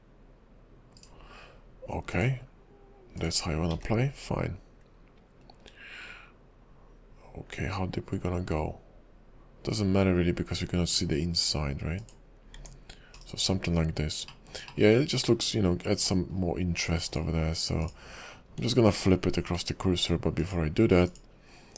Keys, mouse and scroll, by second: 2.2 click, 3.8 s, 12.6 Tab, 13.2 /, 14.6 shift+middle click, 14.9 middle click, 17.2 click, 17.9 click, 18.6 scroll down 2, 20.5 click, 21.2 click.